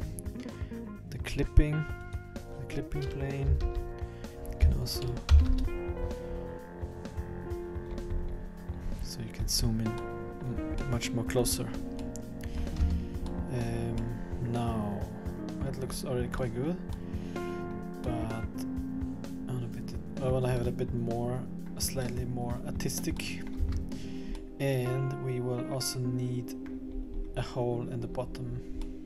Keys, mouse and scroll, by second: 2.0 click, 7.9-8.8 scroll up 8, 8.8-9.4 scroll down 8, 9.4-9.9 scroll up 3, 10.0 middle click, 10.6-11.0 scroll down 1, 11.0 middle click, 12.1 middle click, 12.8 Tab, 13.4 middle click, 14.1 middle click, 15.2 middle click, 15.3 middle click, 15.9-16.3 scroll up 2, 16.5 middle click, 17.2 middle click, 18.1 middle click, 20.7 middle click, 22.0 middle click, 22.7-23.3 scroll up 2, 23.3 middle click, 23.7 Tab, 24.2 scroll down 2, 24.4 middle click, 26.9-27.4 scroll up 5, 28.1-28.9 scroll down 8, 28.9 middle click, 29.0 middle click.